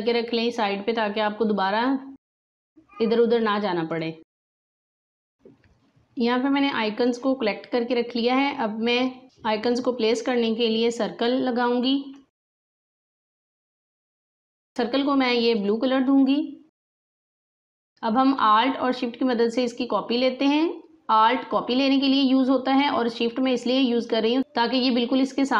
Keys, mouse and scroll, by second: 3.8 click, 5.3 space, 6.9 click, 10.1 click, 12.3-13.2 drag, 14.7 i, 16.3 click, 17.6-25.3 drag.